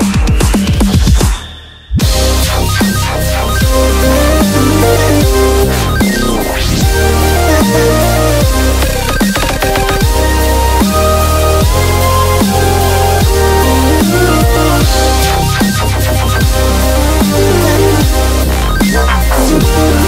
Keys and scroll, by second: 6.7 0.